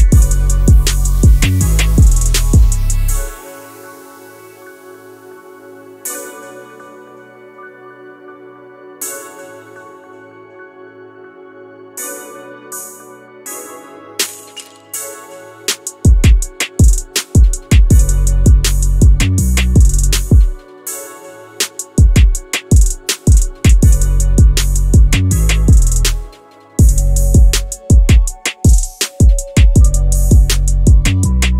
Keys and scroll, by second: 8.9 Escape, 11.7 Escape, 15.0 2, 15.5 Return, 19.2 Escape, 19.9 1, 20.2 Return, 20.5 1, 20.8 Return, 22.3 Escape, 25.9 Escape, 31.3 ctrl+c.